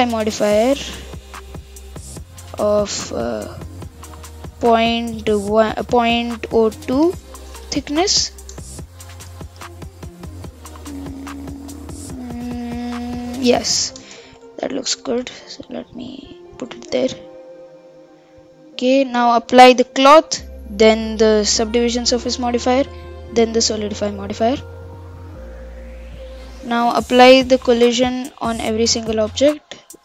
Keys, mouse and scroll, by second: 0.0-2.6 drag, 3.3 click, 3.8-5.8 drag, 5.8 middle click, 6.6-7.0 scroll up 1, 7.0-8.2 middle drag, 8.2 shift+Left, 8.5 shift+space, 14.1 shift+space, 14.3 Left, 14.6 Left, 14.7 Left, 14.9 Left, 15.1 Left, 15.3 Left, 15.8 Right, 16.1 Right, 17.1 scroll down 1, 17.2-19.6 middle drag, 19.6 click, 20.1 ctrl+a, 21.7 ctrl+a, 23.3 ctrl+a, 24.4 click, 25.3 click, 27.7 ctrl+a, 28.7 click, 29.2 click.